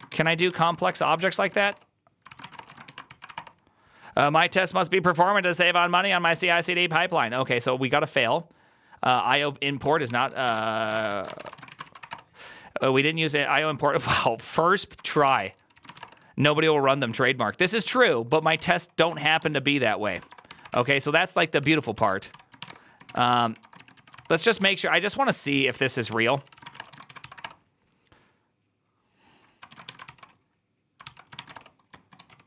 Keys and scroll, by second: 0.0-2.7 typing, 0.5 ctrl+c, 2.2 ctrl+c, 2.2 Return, 2.6 Return, 2.6 ctrl+a, 3.0 ctrl+c, 3.1 Up, 3.2 Return, 9.7-12.2 typing, 14.9 ctrl+a, 15.1-16.3 typing, 15.3 ctrl+c, 15.4 ctrl+c, 17.1 ctrl+c, 17.4-27.0 typing, 18.6 Return, 21.2 Tab, 21.5 ctrl+c, 21.6 ctrl+c, 26.0 Tab, 26.2 ctrl+c, 27.1 ctrl+c, 27.2 Up, 27.3 Return, 29.5 ctrl+a, 29.7 1, 29.9 ctrl+c, 30.9 ctrl+c, 30.9-32.4 typing, 31.4 Return.